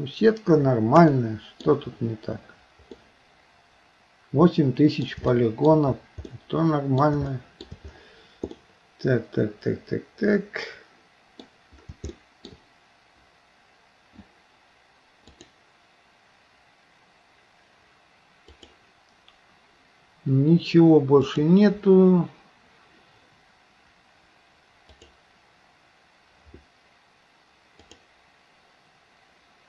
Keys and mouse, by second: 1.1 shift+middle click, 3.0-5.1 middle drag, 5.4 shift+middle click, 6.3 middle click, 7.4 shift+middle click, 8.6-11.5 middle drag, 12.2 shift+middle click, 15.4-21.2 drag, 23.4-28.1 drag.